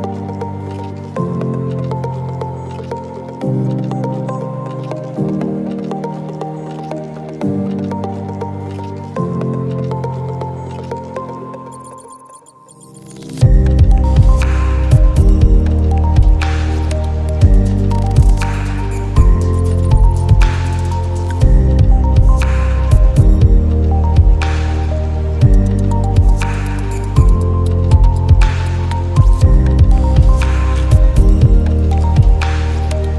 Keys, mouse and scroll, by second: 1.5 alt+scroll down 1, 2.1 click, 2.4-2.7 alt+scroll down 1, 4.3 click, 10.4 click, 11.0 space, 11.0 click, 11.3 space, 12.9-14.1 drag, 16.0 click, 20.3 ctrl+z, 21.4 shift+click, 27.6 shift+click.